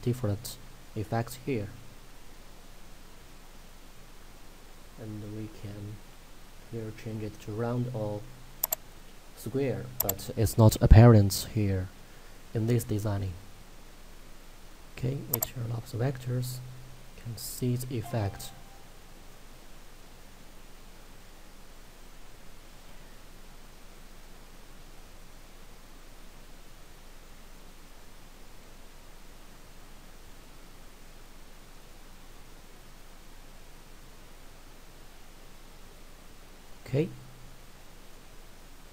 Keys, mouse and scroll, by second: 0.0 scroll up 1, 0.5 middle click, 1.9 scroll down 1, 2.8 middle click, 4.0 scroll up 1, 8.7 click, 15.4 click, 16.5 scroll down 1, 17.0 middle click, 18.4 scroll up 1, 18.8 middle click, 19.7-20.4 scroll up 1, 23.3 scroll down 1, 23.8 middle click, 25.2 scroll up 1, 27.4 scroll down 1, 29.6 middle click, 31.4 scroll down 1, 31.8 middle click, 33.6-34.1 scroll up 1, 37.2-37.7 scroll down 1, 37.7 middle click.